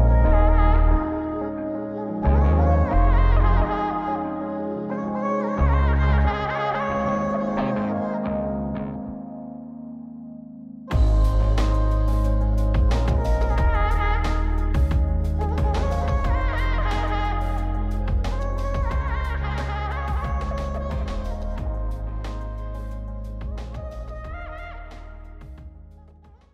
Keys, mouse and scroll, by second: 0.4 ctrl+b, 2.7 ctrl+b, 6.0 click, 8.6-9.8 drag, 11.4 ctrl+b, 12.9 click, 14.2 click.